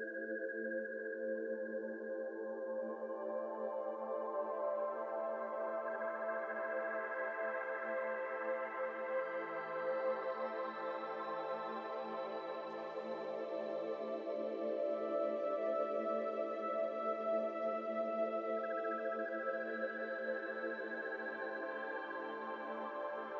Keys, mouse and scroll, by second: 1.4 ., 2.2 s, 3.8 click, 4.3 shift+click, 4.7 s, 6.5 s, 7.7 2, 8.1 click, 9.7 shift+click, 10.2 shift+click, 10.4-11.9 middle drag, 11.9-12.2 scroll down 1, 12.2 ctrl+z, 12.4 ctrl+z, 12.6 ctrl+z, 12.8 ctrl+z, 13.0 ctrl+z, 13.3 ctrl+z, 14.0 middle click, 14.7 3, 15.2 click, 15.8 click, 16.1 shift+click, 16.8 shift+click, 17.3 e, 18.5 ctrl+z, 18.8 middle click, 19.3 ctrl+r, 19.9 1, 20.2 click, 20.5 shift+click, 20.8 s, 22.6 ctrl+b.